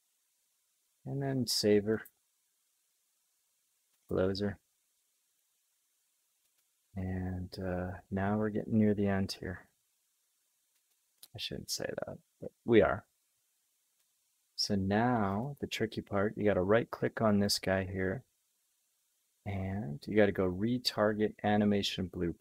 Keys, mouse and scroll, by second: 17.4-22.4 right drag.